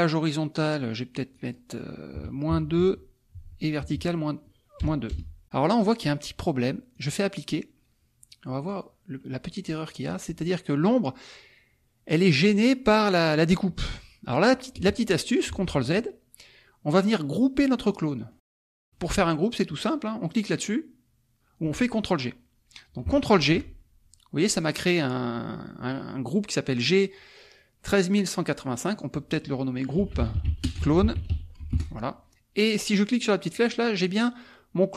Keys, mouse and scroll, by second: 1.3 click, 2.5 KP_2, 2.8 Tab, 3.8 KP_Subtract, 5.1 BackSpace, 6.9 click, 8.6 click, 9.2 middle click, 10.1 middle click, 12.3-13.9 drag, 15.5 ctrl+z, 17.9 click, 18.9 click, 23.4 ctrl+g, 28.8 click, 29.7-31.8 typing, 33.5 click, 34.0-34.9 drag.